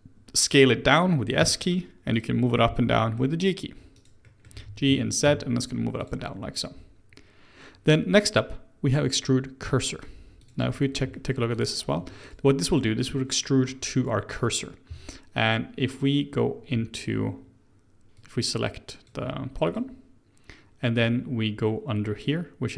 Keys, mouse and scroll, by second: 1.4 s, 2.6 g, 4.2 middle click, 4.5 g, 9.1 click, 9.6 click, 10.4 click, 10.8-11.1 scroll down 3, 11.1 shift+middle click, 11.5 click, 12.0 Tab, 12.2 click, 12.6-13.0 middle drag, 13.0 Tab, 18.1-19.7 drag.